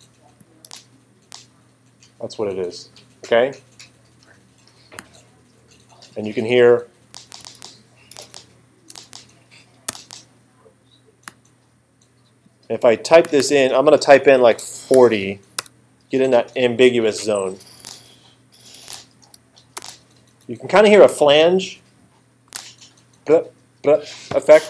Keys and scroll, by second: 0.7 space, 7.1 space, 14.6 4, 14.9 0, 15.6 Return, 17.8 space, 22.5 space.